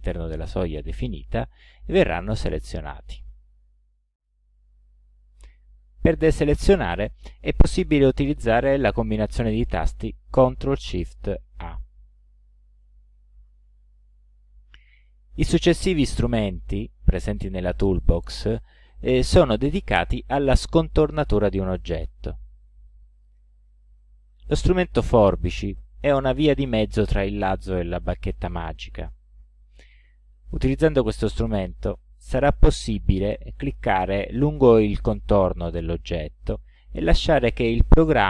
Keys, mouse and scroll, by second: 11.6 ctrl+shift+a, 25.8 click, 30.5 click, 31.5 click, 32.4 click, 33.4 click, 34.6 click, 35.6 click, 36.5 click, 37.4 click.